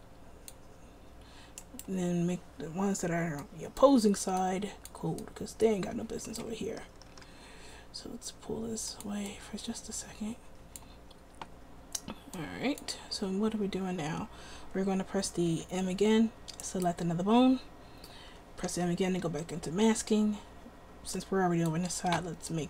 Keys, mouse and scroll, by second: 3.6-7.2 drag, 7.2 r, 15.7 m, 18.8 m.